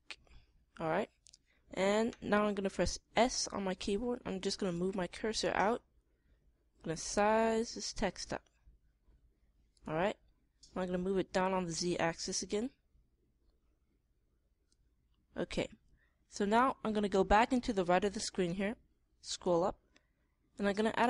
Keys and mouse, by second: 0.0-1.8 drag, 3.6 s, 10.2-11.8 drag, 19.4-21.0 middle drag.